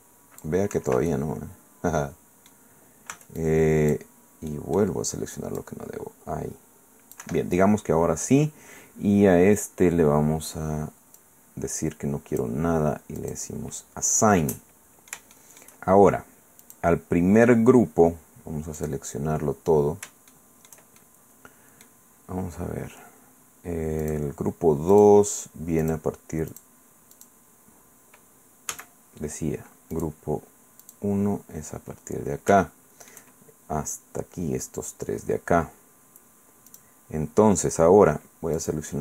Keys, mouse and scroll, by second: 0.7 Escape, 1.1-2.7 drag, 2.7 middle click, 3.1 c, 3.4 click, 5.6-7.3 drag, 7.2 Escape, 11.2-12.6 drag, 13.2 click, 14.4 click, 16.6 click, 18.8 click, 20.3 shift+click, 21.0-22.0 shift+drag, 24.0 click, 24.9 click, 25.8 click, 26.5 click, 27.1 click, 28.7 a, 29.9 click, 30.8 click, 32.6 shift+click, 33.3 shift+middle click, 36.7 click, 38.6 click.